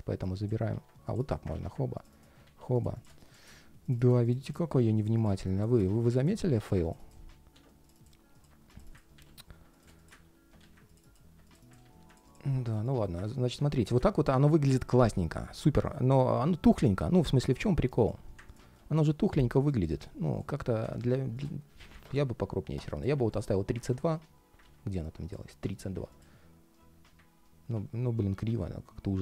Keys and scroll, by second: 0.4 super+c, 1.3 super+c, 2.2 shift+super+v, 4.5 shift+super+v, 6.9 shift+super+v, 7.3 super+z, 8.9 shift+super+v, 11.5 shift+super+v, 23.5 super+z, 24.3 super+z.